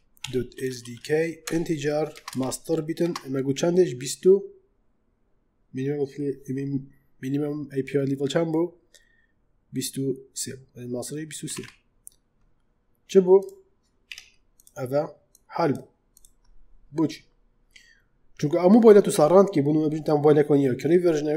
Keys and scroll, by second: 0.0-0.7 typing, 1.3 Return, 2.0 space, 2.3 shift+., 2.9 space, 11.3 2, 12.5 3, 14.0 Tab.